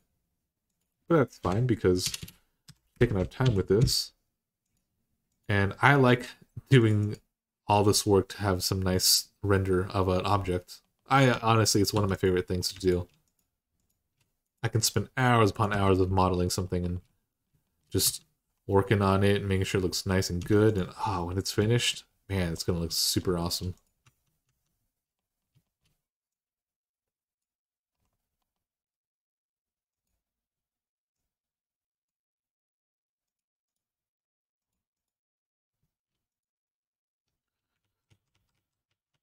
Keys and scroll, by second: 1.2-3.2 typing, 3.6 Return, 11.1 Tab, 11.7 Tab, 15.5 Tab, 17.8 Tab, 20.2 Tab, 23.8 Tab, 24.2 Tab, 37.6 ctrl+z, 38.0 ctrl+z, 38.1 ctrl+z, 38.3 ctrl+z.